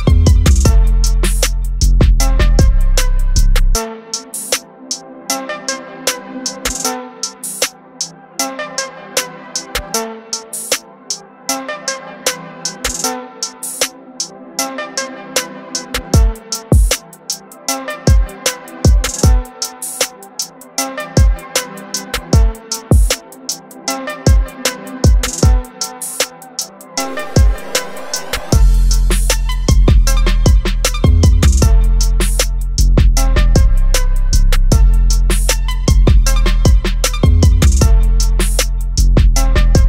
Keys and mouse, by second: 2.3 click, 9.1 click, 11.8 click, 14.9 click, 17.9 click, 21.7 click, 24.7 click, 29.8 click, 36.3 click.